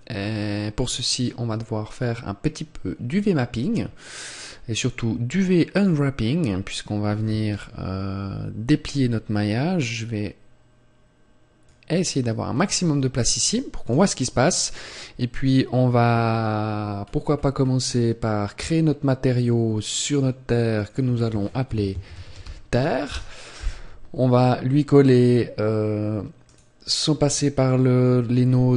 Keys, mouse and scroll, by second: 11.6 click, 20.0 click.